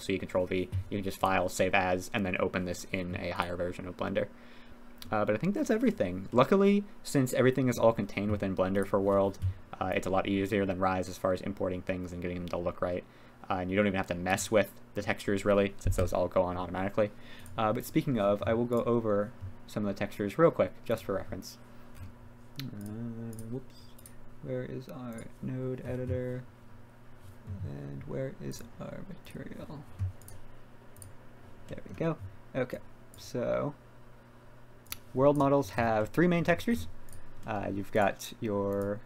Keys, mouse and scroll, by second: 1.2 click, 3.3 click, 6.3-7.8 middle drag, 8.8 click, 10.1-14.8 drag, 15.0 middle drag, 15.9 KP_3, 17.4 click, 17.8 right click, 20.9 click, 25.1 click, 29.3-31.1 drag, 31.7 middle click, 32.8 click, 34.9 click, 36.0 click, 36.1 middle click, 36.2 click, 36.3 middle click, 37.5 middle click, 37.6 drag, 38.0 click, 38.8-39.0 drag.